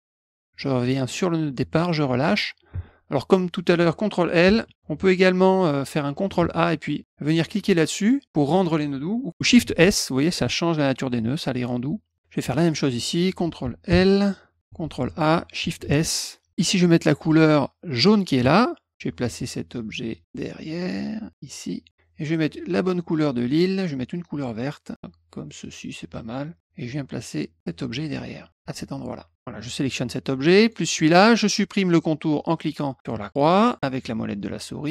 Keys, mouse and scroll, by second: 2.3 middle click, 4.4 ctrl+l, 4.6 ctrl+l, 6.4 a, 12.5 click, 14.8 ctrl+a, 15.8 shift+s, 17.9 click, 20.1-21.4 drag, 22.6 click, 23.5 click, 25.6 click, 27.3-28.5 drag, 29.8 click, 30.6 shift+click, 34.3 middle click.